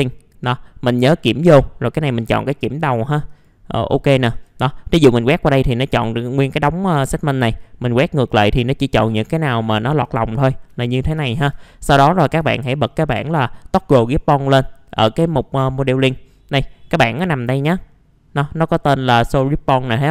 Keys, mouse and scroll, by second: 3.9 middle click, 4.0 scroll down 1, 4.3-6.1 drag, 8.1 click, 8.9-9.2 scroll up 1, 9.3 alt+middle click, 10.4 scroll down 1, 10.8 alt+middle click, 10.9-11.9 typing, 12.9 middle click, 12.9-13.9 scroll down 1, 13.9-20.1 drag.